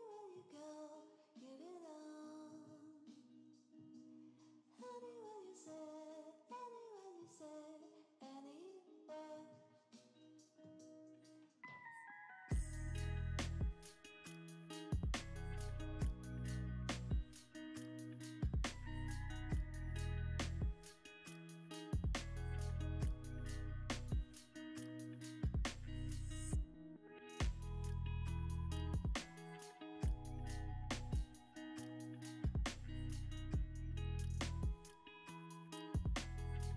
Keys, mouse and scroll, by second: 2.6 ctrl+v, 3.3 Return, 4.5 Escape, 5.2 Tab, 6.3 Tab, 6.4 Tab, 6.7 a, 7.3 e, 10.3 ctrl+v, 10.6 Return, 11.3 Escape, 11.7 Tab, 11.7 Escape, 12.5 middle click, 17.0 shift+click, 18.1 g, 18.3 z, 19.9 g, 20.1 y, 21.2 x, 23.0 middle click, 26.6 g, 27.0 x, 28.6 r, 28.9 z, 31.0 middle click, 34.2 double click.